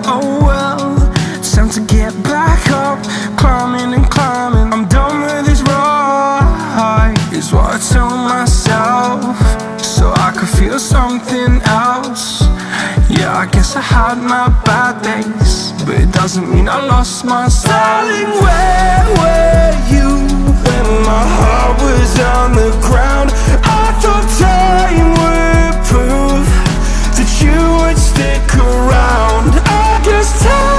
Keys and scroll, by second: 2.3 ctrl+g, 9.2 ctrl+a, 17.0 ctrl+a, 28.5 ctrl+t.